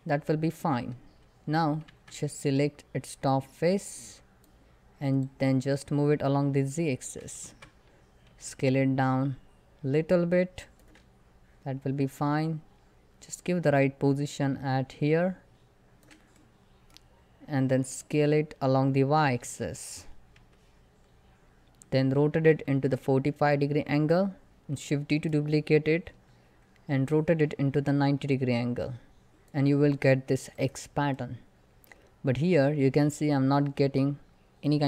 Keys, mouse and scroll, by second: 0.9 Tab, 1.2 scroll up 1, 1.6 Tab, 2.9-7.1 drag, 7.1 Tab, 32.2 middle click, 32.3 scroll up 1.